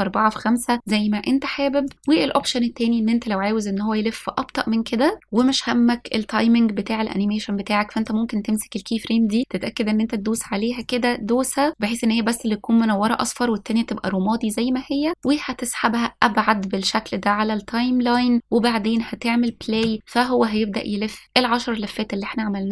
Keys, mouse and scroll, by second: 3.2-3.7 drag, 7.0 click, 9.4 click, 11.7 click, 16.8-19.5 drag, 20.3-20.8 drag, 21.1 space.